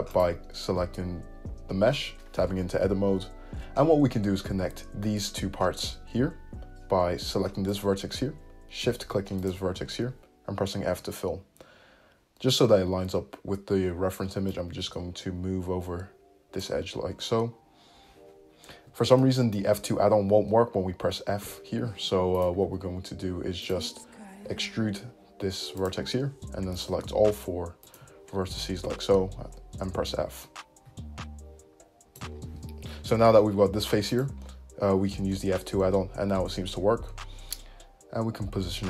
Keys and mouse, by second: 0.5-2.5 right drag, 2.5 Tab, 2.5-7.9 middle drag, 7.9 right click, 8.0-9.5 shift+middle drag, 9.5 shift+click, 9.5-14.6 shift+middle drag, 10.9 f, 14.6-22.5 drag, 18.8 ctrl+z, 20.4 `, 21.5 f, 22.5-23.7 ctrl+middle drag, 22.7 ctrl+z, 23.7 click, 23.8-26.9 middle drag, 24.5 e, 26.9 shift+right click, 27.2 shift+middle click, 27.4 shift+click, 27.5 shift+middle click, 27.9 shift+click, 28.0-30.2 shift+middle drag, 28.9 f, 30.2-34.3 drag, 34.3-38.8 middle drag, 35.1 f.